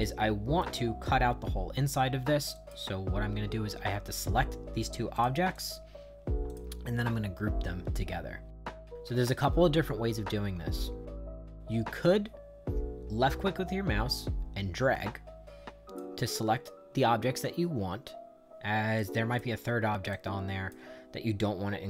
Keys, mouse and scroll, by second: 0.0 right click, 2.5 click, 5.2 click, 5.5 click, 6.5 click, 12.5-16.0 drag, 19.0 click, 20.1 click.